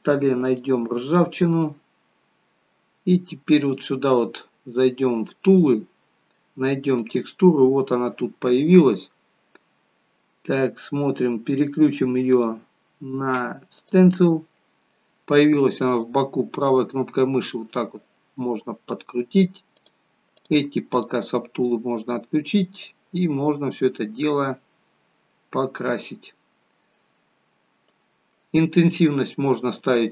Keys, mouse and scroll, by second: 3.6 click, 4.8-5.2 scroll down 4, 5.4 scroll down 11, 7.0 click, 11.2-12.2 scroll down 1, 12.2 click, 12.2-12.6 scroll down 1, 15.9 right click, 19.7 click, 20.3 click.